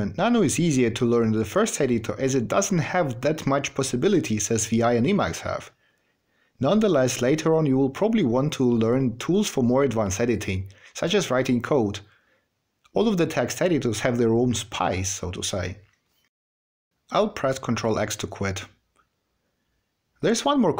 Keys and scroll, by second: 17.8 ctrl+x.